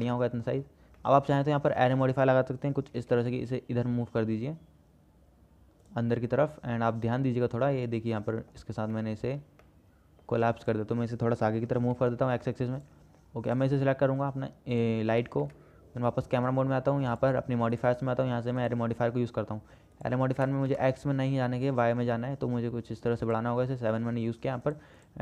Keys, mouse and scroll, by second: 1.3 middle click, 3.2 g, 6.5-6.8 drag, 7.3-7.9 drag, 8.6 click, 9.3 shift+click, 9.9-10.5 middle drag, 10.9 click, 11.9 g, 14.2-14.5 middle drag, 15.7 KP_0, 17.9-19.0 drag, 20.2-21.4 drag, 22.0-23.6 drag, 24.9 click.